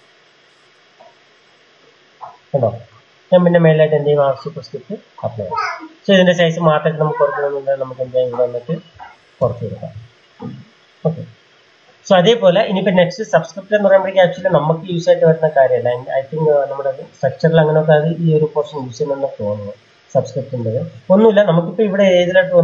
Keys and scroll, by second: 8.8-9.5 typing, 22.1 m.